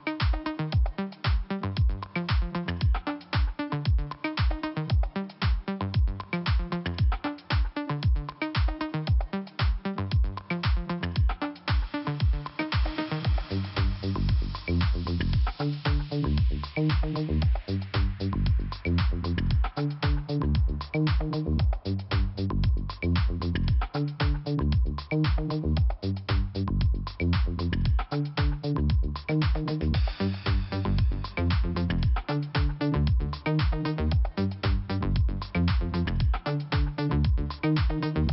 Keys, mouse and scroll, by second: 0.2 click, 3.1-3.8 scroll down 1, 3.8 scroll down 1, 5.1 right click, 5.8 click, 7.8 click, 8.1 click, 9.4 click, 10.6 click, 14.6 click, 16.3 scroll down 1, 18.0 click, 21.3 scroll up 2, 21.6 click, 22.8 click, 25.1 click, 27.0 click, 28.0 scroll down 2, 30.3 click, 33.1 click, 34.6 click, 34.7 click, 36.8 click.